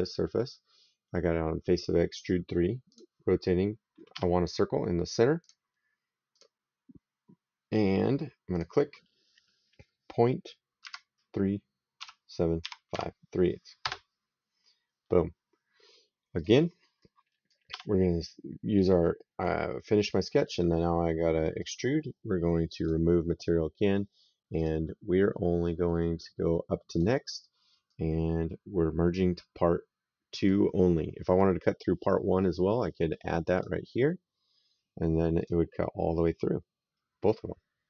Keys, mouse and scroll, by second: 2.7 click, 4.0 s, 5.3 click, 8.4 click, 10.7 KP_Decimal, 11.8 KP_3, 12.5 KP_7, 12.8 KP_5, 13.7 KP_Enter, 16.2 click, 16.9 right click, 20.3 click, 21.5 click, 22.7 click, 24.4 click, 26.8 click, 27.7 right click, 33.4 click, 35.3 click, 36.1 right click.